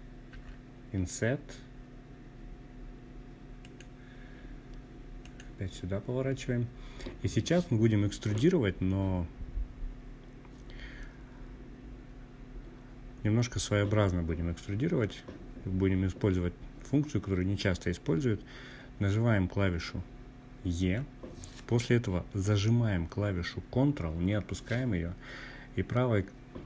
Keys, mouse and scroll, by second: 1.7 click, 3.2 click, 18.7 e.